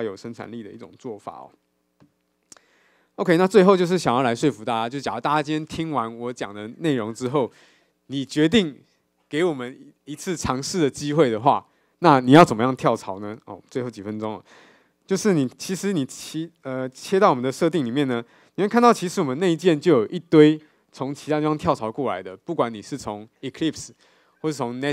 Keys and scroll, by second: 15.1 super+..